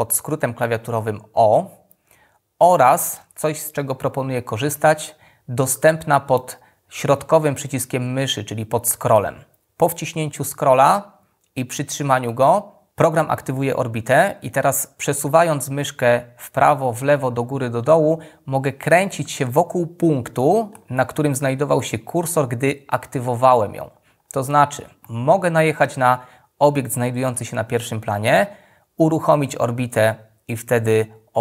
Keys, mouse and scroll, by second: 7.6-14.8 middle drag.